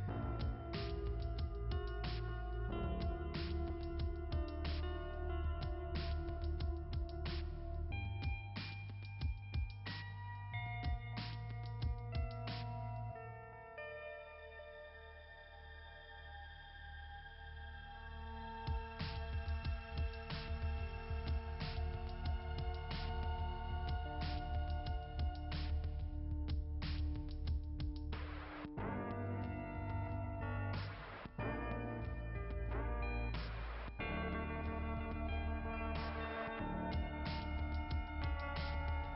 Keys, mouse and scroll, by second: 7.5-11.3 typing, 11.8 right click, 13.3 click, 16.0 right click, 18.1 click, 19.1 click, 20.1 click, 20.8 click, 22.1 click, 22.5 click, 23.9 click, 25.2 click, 27.1 click, 28.5 click, 30.1 click, 32.0-34.3 typing, 36.6 click.